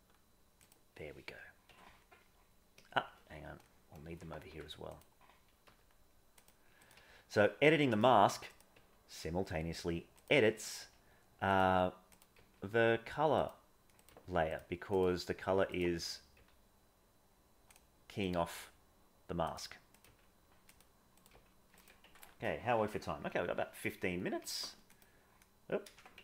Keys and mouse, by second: 1.6 Tab, 3.6 middle click, 4.5 Tab, 4.8 click, 5.6 g, 6.8 click, 6.9 g, 13.9 click, 14.1 g, 15.0 g, 19.9 click, 20.0 g, 21.1 click, 22.0 Tab, 24.8 click, 25.8 ctrl+shift+z, 26.1 Tab.